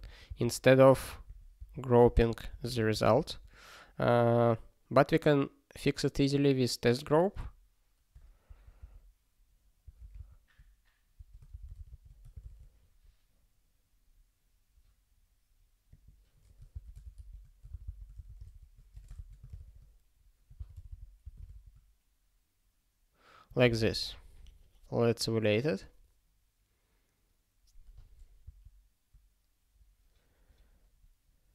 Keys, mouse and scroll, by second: 0.3 Return, 1.3 ctrl+a, 1.6 ctrl+k, 2.0 ctrl+k, 2.3 ctrl+p, 2.4 ctrl+e, 2.9 space, 3.1 ", 11.1-12.4 typing, 12.4 ctrl+s, 14.2 scroll up 1, 15.9 click, 16.7 ctrl+b, 16.8-19.1 typing, 17.7 ctrl+b, 17.8 ctrl+b, 18.4 ctrl+s, 19.6 ctrl+s, 20.5 ctrl+b, 20.7 ctrl+d, 20.8 ctrl+d, 21.5 ctrl+s.